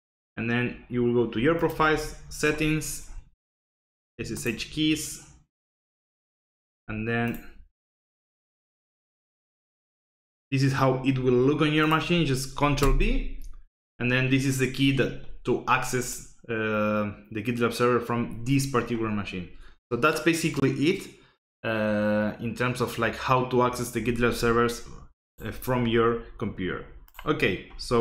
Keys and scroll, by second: 12.8 ctrl+v.